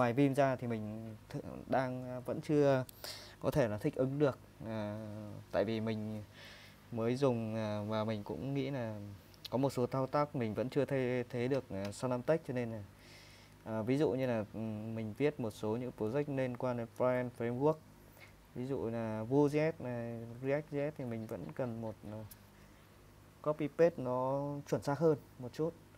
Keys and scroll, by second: 12.8 super+Tab, 13.5 super+Tab.